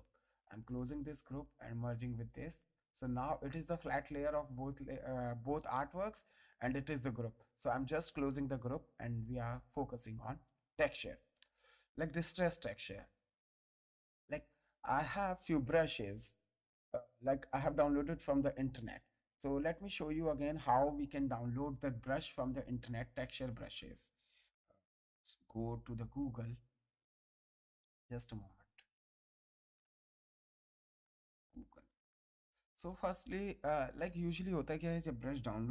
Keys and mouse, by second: 0.1 click, 1.5 ctrl+click, 2.1 ctrl+e, 3.0 click, 5.9 click, 8.0 ctrl+click, 8.9 ctrl+click, 9.7 ctrl+d, 10.0 ctrl+space, 10.2 ctrl+click, 10.7 ctrl+Tab, 11.5 ctrl+click, 12.6 ctrl+click, 16.2 click, 18.1 click, 21.6 click, 25.0 ctrl+s, 25.6 g, 28.1 click, 29.2 click, 30.2 ctrl+a, 30.9-32.6 typing, 33.9 click.